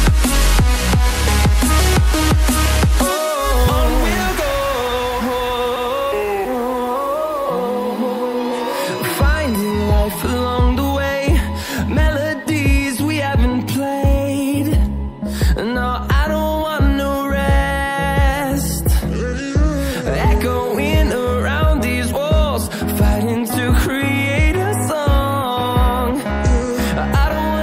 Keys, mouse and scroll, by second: 3.6 double click, 5.3 click, 8.5 shift+click, 14.3 scroll down 1, 14.6 scroll up 1, 15.9 click, 16.8 Caps_Lock, 16.9-20.8 typing, 22.2 click, 27.2 double click.